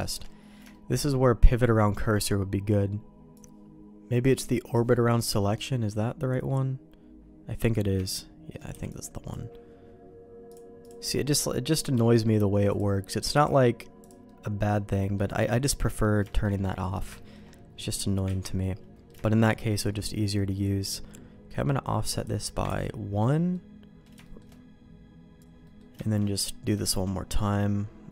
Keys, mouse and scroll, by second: 0.2 middle click, 0.6 shift+middle click, 1.1 middle click, 1.7 middle click, 5.0 middle click, 5.4-7.7 middle drag, 8.0 shift+middle click, 8.6 b, 14.2 middle click, 15.7 middle click, 16.2 shift+middle click, 16.7 middle click, 17.1 shift+middle click, 18.3 ctrl+q, 18.5 middle click, 19.2 middle click, 19.6 middle click, 22.1 click, 22.6 ctrl+x, 23.5 middle click, 24.2 middle click, 25.6 middle click, 25.9 shift+middle click, 26.4 middle click, 26.7 shift+middle click, 27.3 middle click.